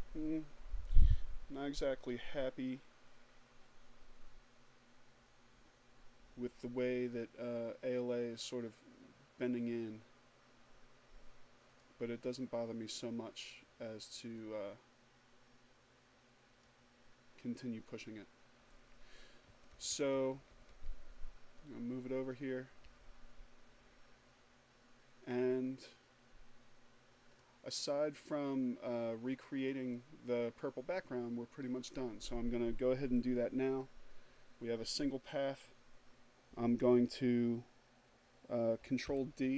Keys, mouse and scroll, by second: 9.9 click, 12.4-15.1 drag, 17.5 Right, 20.9 Up, 23.4 click, 25.6 click, 27.7 click, 37.1 ctrl+d.